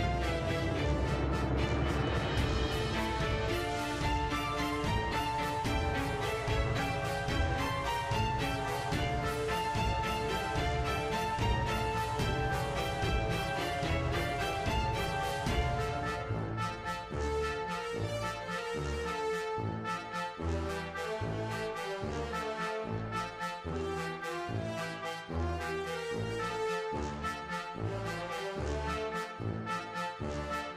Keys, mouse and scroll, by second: 0.5 scroll down 1, 0.6-1.1 scroll, 1.1 click, 1.9 click, 2.0-2.4 scroll, 2.5 click, 3.0 space, 4.6 space, 4.8 click, 5.5 click, 6.6 click, 6.6 scroll down 6, 7.0 scroll up 1, 7.1 shift+middle click, 7.8 scroll up 3, 7.9 shift+middle click, 8.2 click, 8.3 scroll down 1, 8.3-8.7 shift+middle drag, 8.7 scroll up 1, 8.7-11.0 shift+middle drag, 11.0 scroll down 2, 11.2 scroll up 2, 11.4 shift+middle drag, 11.6-12.7 scroll down 5, 11.7 shift+middle drag, 12.1 shift+middle drag, 12.4 shift+z, 12.7 shift+middle drag, 13.2 g, 13.5 click, 13.7-19.1 middle drag, 19.1 click, 19.2 scroll, 19.3 shift+middle click, 19.6 middle click, 20.4 click, 21.7-23.8 drag, 23.8 space, 24.2 scroll, 24.5 space, 25.4 click, 25.5 space, 26.2 space, 26.3 click, 27.1 middle drag, 27.3-27.8 scroll, 27.4 shift+middle drag, 27.8-28.2 shift+middle drag, 28.4-29.9 drag, 30.6 click, 30.7 middle click.